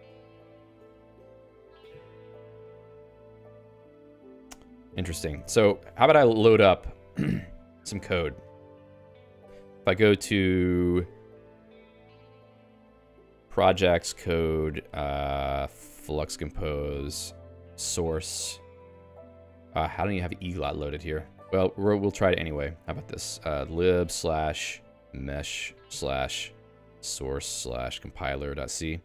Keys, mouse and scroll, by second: 0.0-1.6 typing, 9.6 ctrl+f, 10.8 BackSpace, 13.1-16.4 typing, 17.4 ctrl+j, 17.5 ctrl+j, 17.9 Tab, 18.4 ctrl+j, 22.8-25.7 typing, 26.0 Tab, 26.8-28.6 typing.